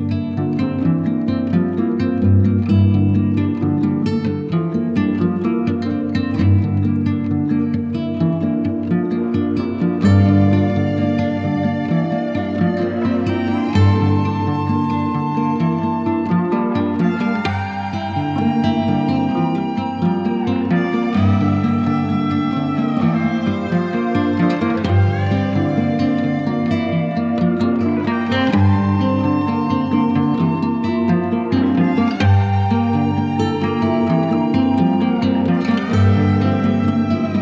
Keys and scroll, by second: 8.1 z, 9.4 b, 11.7 z, 12.6 v, 24.6 super+i, 25.4 super+z, 32.8 [, 36.2 [, 37.2 ].